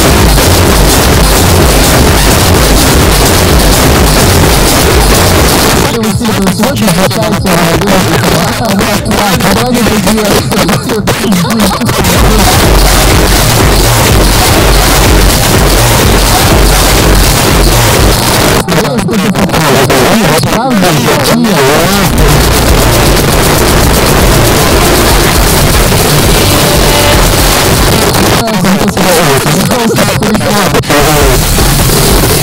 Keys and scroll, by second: 5.4 Page_Down, 18.2 Page_Down, 27.9 Page_Down.